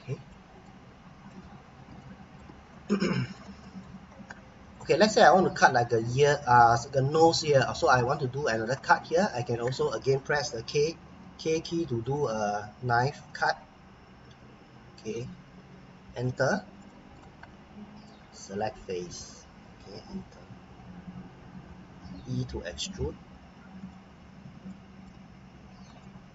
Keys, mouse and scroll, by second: 0.5 scroll up 1, 0.6 middle click, 1.6 scroll up 1, 2.0 middle click, 2.6-2.9 scroll up 1, 3.1 middle click, 4.3-6.5 scroll up 1, 11.1 k, 12.1 click, 16.2 Return, 16.8 middle click, 18.4 click, 22.0 e, 23.8 click, 24.2 scroll down 1, 24.7 middle click, 25.3-26.0 scroll up 1, 26.0 middle click.